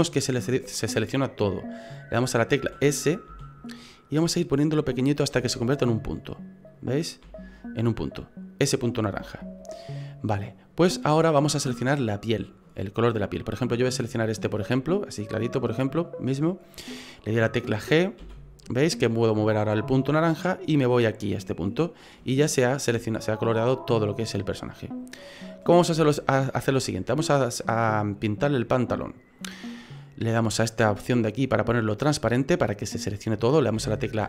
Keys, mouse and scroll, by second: 2.6 s, 3.3 s, 7.2 s, 9.2 s, 22.2 middle click, 25.6 scroll up 4, 26.0 shift+middle click, 28.2 middle click, 31.4 click, 33.8 a, 34.1 a.